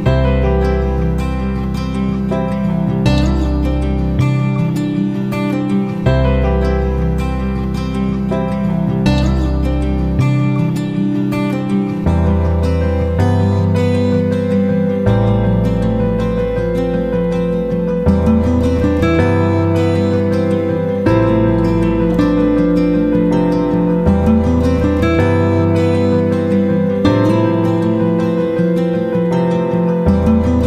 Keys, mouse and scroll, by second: 0.2 click, 2.7 click, 10.8-22.6 drag, 22.8 shift+click, 23.6 ctrl+g, 24.5 ctrl+shift+click, 28.1 ctrl+shift+g, 29.4 click.